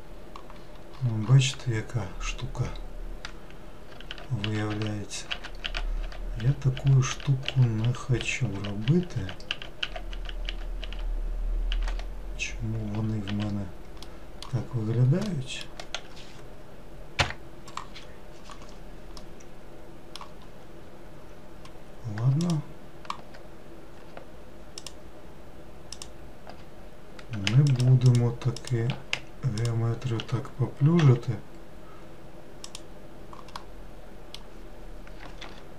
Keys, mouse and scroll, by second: 3.9 scroll up 5, 4.1 ctrl+z, 4.4 ctrl+z, 4.7 ctrl+z, 5.3 ctrl+z, 5.6 ctrl+z, 6.0 ctrl+z, 6.4 ctrl+z, 6.7 ctrl+z, 7.1 ctrl+z, 7.8 ctrl+z, 8.1 ctrl+z, 8.5 ctrl+z, 8.8 ctrl+z, 9.2 ctrl+z, 9.5 ctrl+z, 10.1 ctrl+z, 10.4 ctrl+z, 11.7 ctrl+z, 13.3 ctrl+z, 14.0 middle click, 14.6-14.9 scroll down 4, 15.3-17.2 middle drag, 17.2 KP_Decimal, 19.2-20.8 middle drag, 20.8-22.1 scroll up 1, 22.4 alt+click, 24.8 alt+click, 25.9 alt+click, 27.7 shift+click, 28.0 alt+shift+click, 28.6 alt+shift+click, 29.6 alt+shift+click, 31.0 x, 33.6-35.4 middle drag, 35.4 ctrl+r.